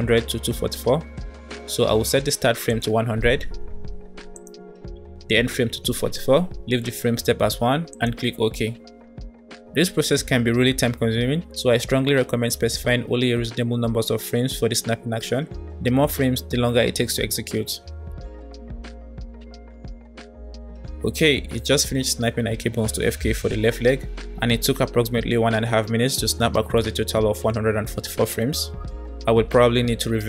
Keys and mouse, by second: 3.0 KP_0, 6.0 KP_4.